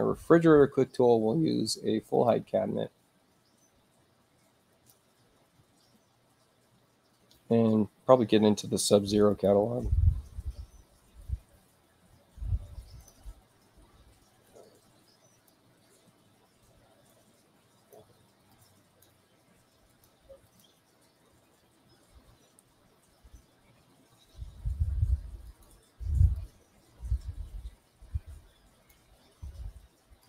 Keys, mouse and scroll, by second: 2.1 click, 4.7 click, 9.3 click, 12.4 space, 13.0 click, 14.5 click, 17.1 click, 18.5 click, 19.9 click, 20.5 click, 23.7 middle click, 23.7-24.1 scroll down 2, 25.5 click, 26.4-28.9 drag, 30.2 click.